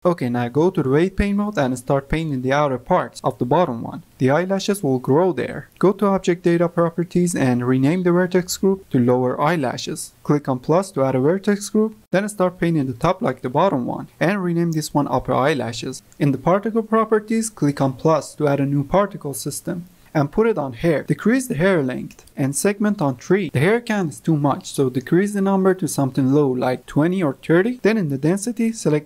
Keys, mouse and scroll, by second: 0.0 ctrl+click, 0.1 ctrl+Tab, 0.6 f, 0.8 click, 1.3 ctrl+z, 1.3 click, 2.1-4.8 ctrl+drag, 2.5 ctrl+z, 5.2 ctrl+click, 5.4 ctrl+z, 6.2-9.3 drag, 10.8 click, 11.7 f, 12.1 ctrl+z, 12.1-14.5 drag, 14.7-15.8 drag, 15.1 p, 15.4 BackSpace, 15.5 e, 16.5 click, 18.0 click, 20.0 click, 21.9 click, 22.6-23.9 drag, 24.8-27.5 drag, 28.8 click.